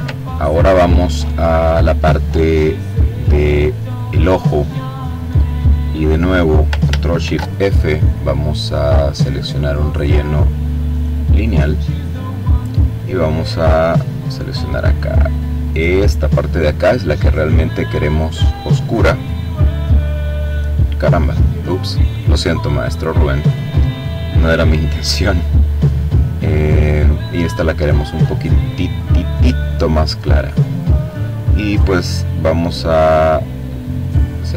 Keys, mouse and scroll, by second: 2.2 click, 3.3 click, 6.6 ctrl+shift+f, 10.5 click, 13.5 click, 15.1 click, 17.7 click, 21.0-23.5 drag, 24.3 click, 26.7-30.2 drag, 33.3 click, 34.4 click.